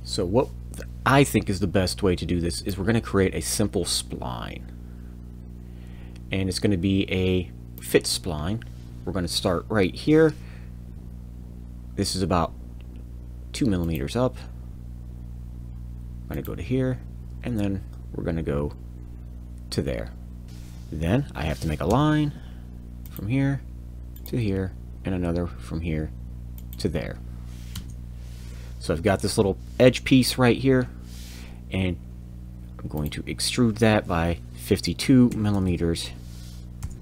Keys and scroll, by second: 20.4 Return, 21.9 l, 27.7 Return, 30.7 e, 34.9 5, 35.3 2, 35.5 m.